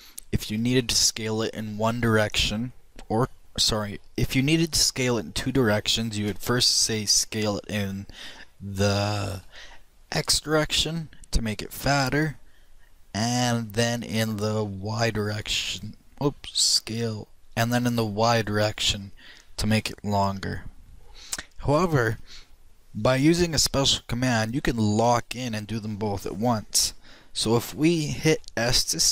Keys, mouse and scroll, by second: 9.4 s, 14.2 x, 16.7 s, 23.4 ctrl+z, 25.0 ctrl+z.